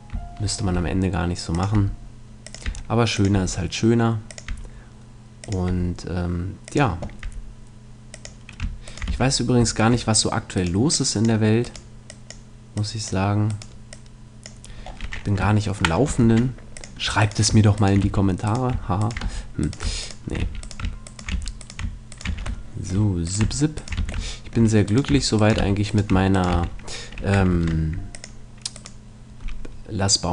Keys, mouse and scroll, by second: 0.7 e, 1.6-10.2 drag, 1.7 e, 2.7 e, 3.3 e, 4.5 e, 5.7 e, 7.3 middle click, 7.3 e, 8.9-14.9 right drag, 9.1 f, 10.0 middle click, 10.9-14.9 drag, 14.9 middle click, 16.2 ctrl+Tab, 17.2 right click, 18.0 f, 19.3 f, 20.4 f, 21.3 f, 22.3 f, 22.7-25.8 right drag, 22.7-26.3 middle drag, 24.0 f, 24.4 click, 25.6 f, 26.3 right click, 26.5 f, 26.9 middle click, 27.5 ctrl+Tab.